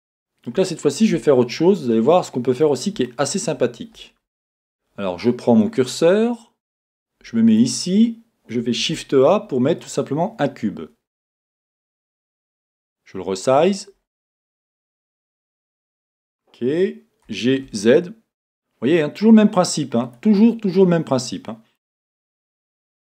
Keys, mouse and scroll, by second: 1.3 scroll up 1, 2.7-3.0 scroll up 1, 5.9 click, 7.5 click, 8.8 shift+a, 20.5-22.6 middle drag, 22.7 shift+middle click.